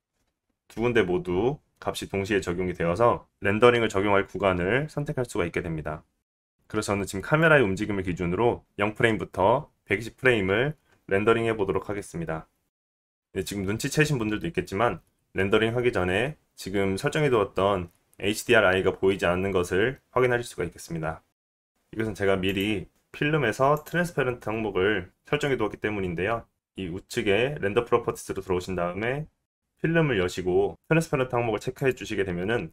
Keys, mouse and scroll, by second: 1.9-2.8 scroll down 1, 6.5 middle click, 6.8-24.7 drag, 24.7-26.4 middle drag, 26.4-31.1 drag, 31.1-32.7 middle drag.